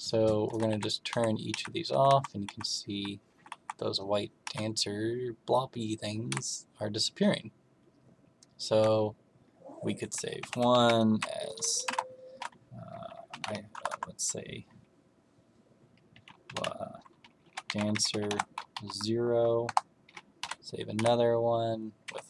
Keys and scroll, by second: 0.4 Left, 0.7 Down, 1.0 Right, 1.4 Right, 1.8 Left, 2.0 Down, 2.4 Right, 2.8 Right, 3.2 Left, 3.5 Down, 4.4 Right, 6.2 Right, 10.3 Escape, 10.7-11.8 typing, 13.0-13.9 typing, 17.1-19.2 typing, 19.6 Return, 20.3 m, 20.9 Right, 22.0 Escape.